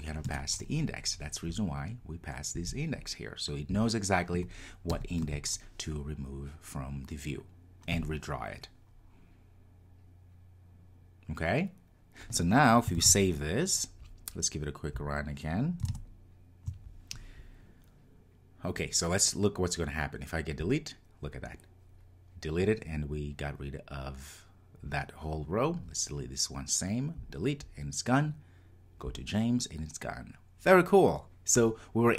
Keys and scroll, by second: 0.3 Return, 13.0 super+s, 15.1 ctrl+r.